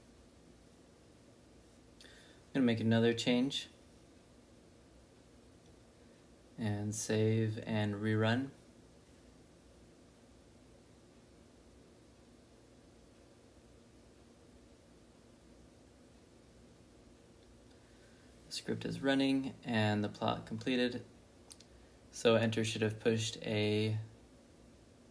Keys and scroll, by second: 0.3-4.4 typing, 5.5 i, 6.8 shift+;, 7.2 w, 7.5 Return, 8.6 typing.